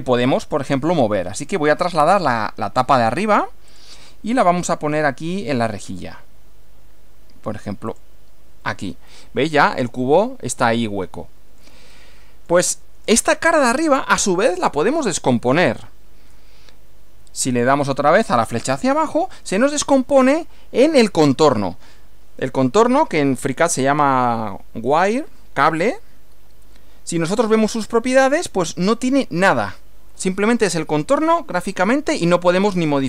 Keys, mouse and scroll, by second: 1.6 click, 3.8 click, 7.9 click, 9.1-11.8 middle drag, 11.9-13.3 middle drag, 13.7 click, 18.5 click, 27.1 click, 28.1 click.